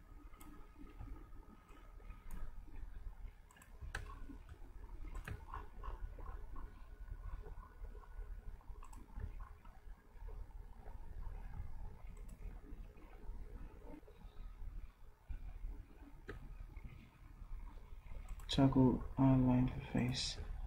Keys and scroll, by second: 1.0 v, 3.7 v.